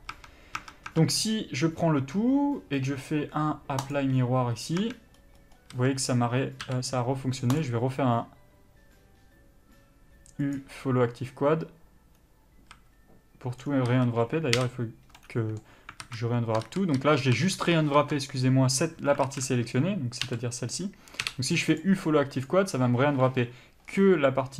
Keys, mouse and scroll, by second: 0.3 scroll up 1, 0.4 Tab, 1.4-3.0 scroll down 1, 4.2 click, 5.0 Tab, 5.4-6.0 scroll up 1, 6.0 a, 10.8 u, 13.0 a, 13.8 scroll down 1, 14.1 a, 15.4 middle click, 16.3 alt+a, 16.9 ctrl+z, 19.5 alt+a, 20.5 l, 22.7 u, 24.1 scroll down 1, 24.3 middle click.